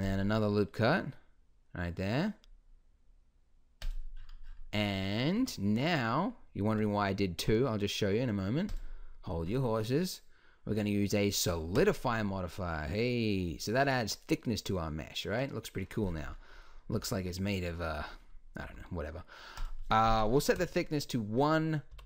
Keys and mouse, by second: 4.1-5.2 middle drag, 5.4 Tab, 6.7 Tab, 7.3 Tab, 12.7-14.1 drag, 14.1-15.8 middle drag, 17.0 z, 18.7 z, 19.0 click.